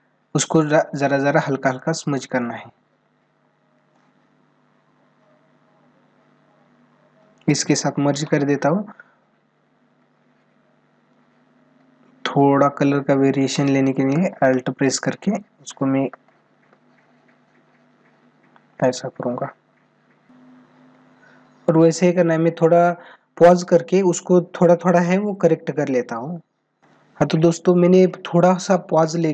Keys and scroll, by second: 21.6 ctrl+=.